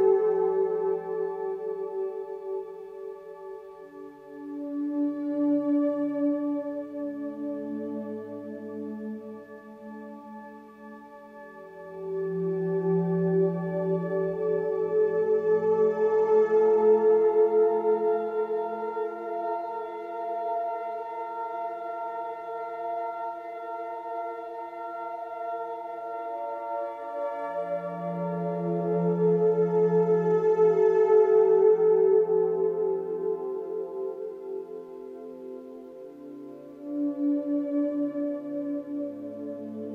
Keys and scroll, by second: 34.4 ctrl+=.